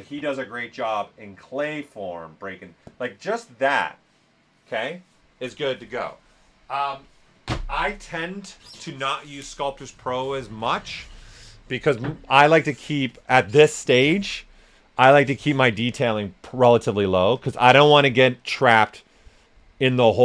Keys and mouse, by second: 16.6 s, 16.7-20.2 drag.